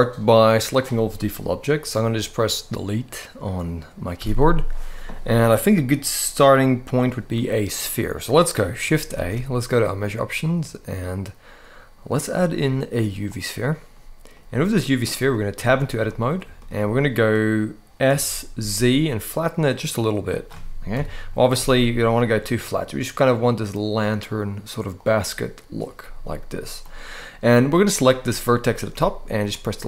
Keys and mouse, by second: 3.9 Delete, 6.8 middle click, 8.9 shift+a, 13.7-14.1 middle drag, 14.8 middle click, 15.3 Tab, 15.8 middle click, 16.3 shift+middle click, 17.8 s, 18.3 z, 19.9 click, 20.7 KP_1, 21.3 s, 21.5 z, 24.7 click, 26.6 middle click, 27.6 click, 28.0 middle click, 28.7 x, 29.7 middle click.